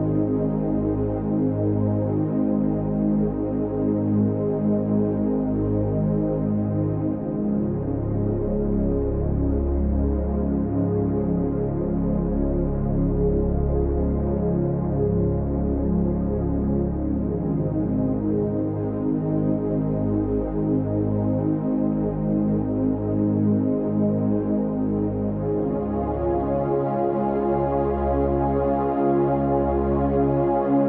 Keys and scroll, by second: 14.1 Right.